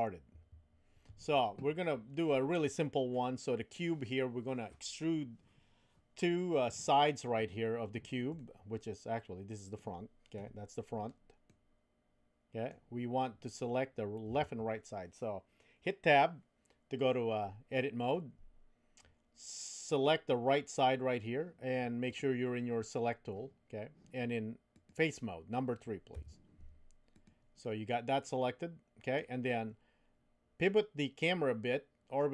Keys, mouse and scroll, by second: 0.3 Tab, 8.4-9.8 middle drag, 10.3 KP_1, 11.4-12.7 middle drag, 14.3 Tab, 19.9 click, 22.1 click, 24.7 click, 26.1 3, 27.1 click, 27.6-29.2 middle drag, 30.7-32.3 middle drag.